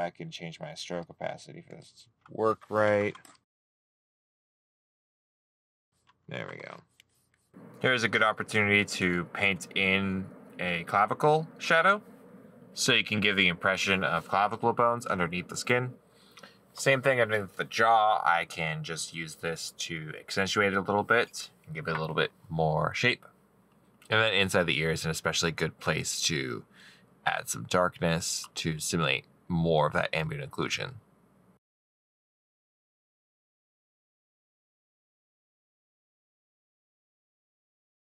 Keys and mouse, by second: 7.7 middle click, 8.0 right click, 15.6 right click, 16.5 middle click, 24.1 middle click, 25.3 right click, 28.8 middle click, 32.1 right click, 32.3 middle click, 34.2 middle click, 34.3 right click, 35.6 middle click, 35.9 right click, 36.4 middle click, 36.7 right click, 37.2 middle click.